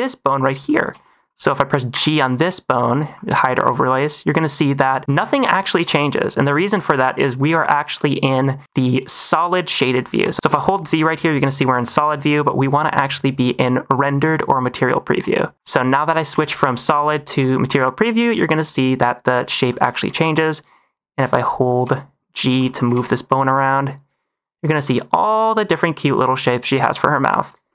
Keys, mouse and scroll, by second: 0.6 shift+middle click, 0.9 middle drag, 1.9 g, 3.1 -, 3.5 g, 5.5 -, 5.7 g, 6.8 click, 10.0 shift+middle drag, 10.3 z, 10.4 z, 16.2 z, 16.8 z, 17.7-18.4 middle drag, 19.3 middle drag, 20.0 g, 21.3 -, 21.7 g, 22.5 -, 22.8 g, 26.7 click, 27.6 shift+middle click.